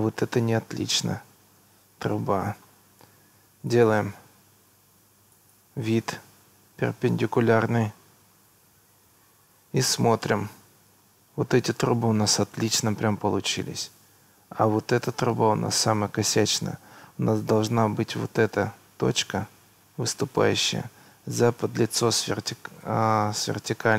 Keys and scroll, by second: 6.7 Escape.